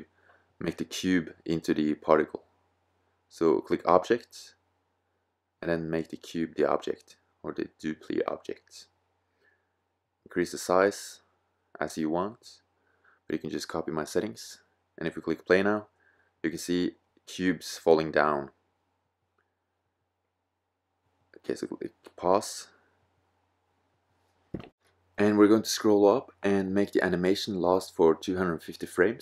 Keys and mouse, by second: 3.2-6.3 drag, 6.3-8.7 middle drag, 8.7-10.6 drag, 10.6-17.9 middle drag, 21.3-22.8 drag, 22.8-25.6 middle drag, 25.6 click, 26.4-29.2 drag.